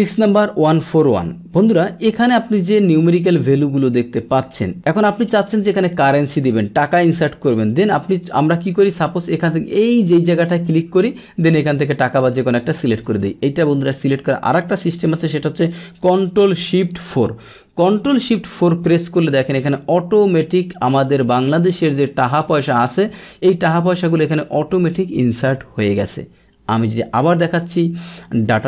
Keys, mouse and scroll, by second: 1.6 click, 2.5-3.7 drag, 4.7-6.1 drag, 10.2 click, 13.0 click, 17.0 ctrl+shift+4, 20.8-21.9 drag, 22.4 click, 22.8 click, 23.9-24.9 drag, 27.0 ctrl+z, 27.6 click, 28.3 ctrl+z.